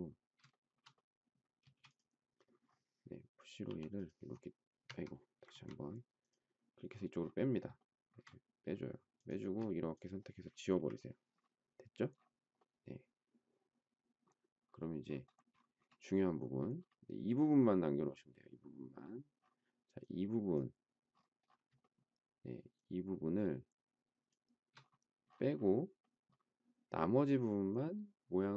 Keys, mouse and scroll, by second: 0.5 shift+middle click, 1.6 space, 3.6 p, 4.8 Escape, 7.7 shift+middle click, 9.4 space, 10.7 Delete, 21.8 shift+middle click, 22.7 shift+click.